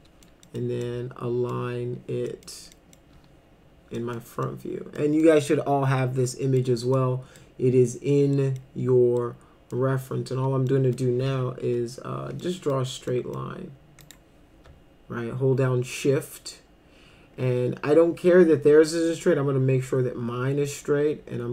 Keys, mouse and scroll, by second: 0.0 middle click, 0.4 middle click, 0.8 middle click, 2.3 middle click, 2.7 middle click, 3.9 middle click, 4.5 middle click, 5.2-6.6 middle drag, 7.0 middle click, 8.4 middle click, 9.2 middle click, 10.7 middle click, 11.3 F3, 11.6 F3, 12.4 middle click, 13.1 middle click, 14.0 click.